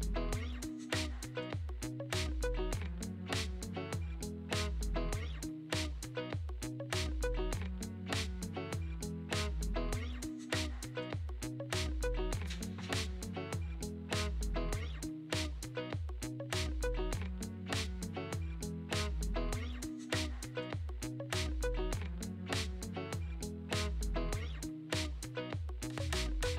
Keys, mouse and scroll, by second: 0.5-2.8 drag, 2.8-4.3 middle drag, 4.3-5.6 scroll down 2, 5.6 scroll down 1, 5.7 shift+a, 11.0 g, 12.2 g, 13.4 r, 14.0 s, 15.2 click, 15.8 click, 16.4 KP_0, 16.9-17.4 scroll up 5, 17.4-19.5 shift+middle drag, 19.5 scroll down 1.